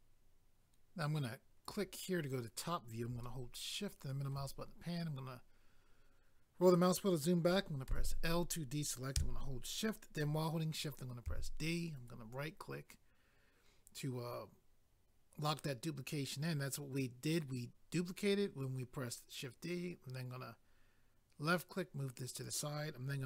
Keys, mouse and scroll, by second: 0.0 click, 1.7 click, 1.8 click, 3.2 shift+middle click, 4.6-5.8 scroll down 1, 7.9 i, 11.9 right click, 12.1 right click, 19.7 click.